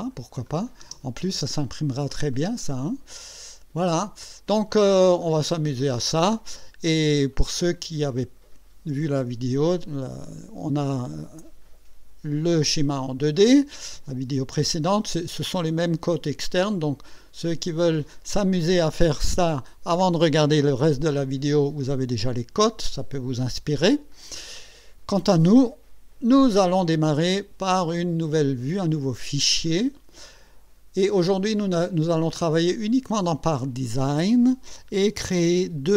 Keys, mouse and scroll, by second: 0.5 click, 0.9 space, 2.1-3.0 drag, 3.1-5.1 drag, 5.3 click, 7.8 click, 29.0 click.